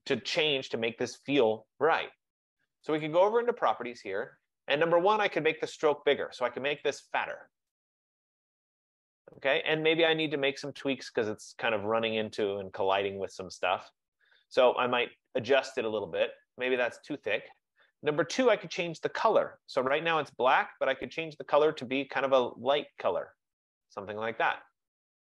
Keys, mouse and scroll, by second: 3.1 click, 6.3 click, 6.9 click, 7.6 click, 16.9 click, 20.0 click, 22.6 click, 23.6 click.